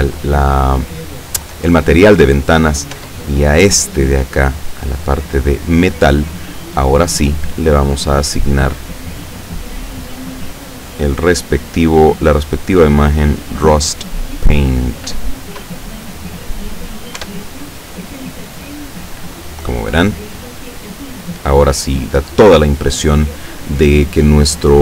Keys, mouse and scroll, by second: 3.0 Tab, 3.3 right click, 5.2 click, 6.4 click, 7.5 click, 9.0 click, 10.1 click, 12.6 click, 13.5 click, 17.3 F12, 20.5-21.3 scroll up 4, 22.7-23.2 scroll down 2.